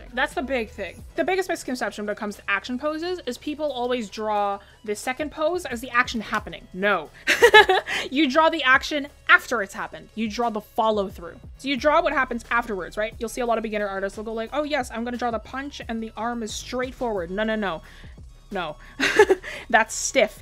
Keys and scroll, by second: 14.0 ctrl+z, 17.7 ctrl+z.